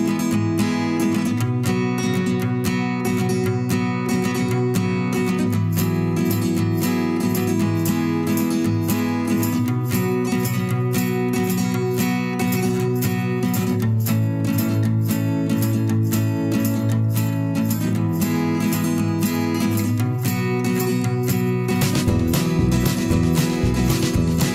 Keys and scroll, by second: 0.9 2, 7.2 ctrl+c.